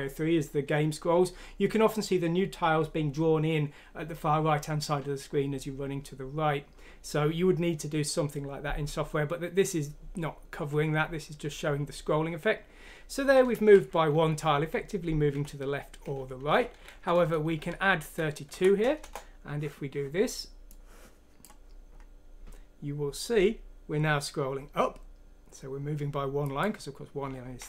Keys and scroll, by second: 13.5 Home, 15.3 Down, 16.1 Left, 16.5 Delete, 16.8 Down, 16.9 Delete, 17.0 Down, 17.2 Delete, 17.5 Up, 18.5 F6, 19.0 Return.